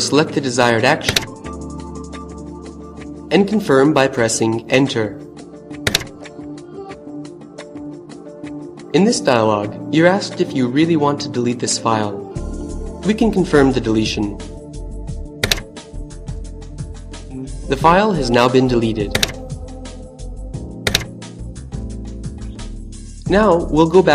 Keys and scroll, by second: 3.8 Return, 14.5 Return, 17.9 Return, 20.1 Return.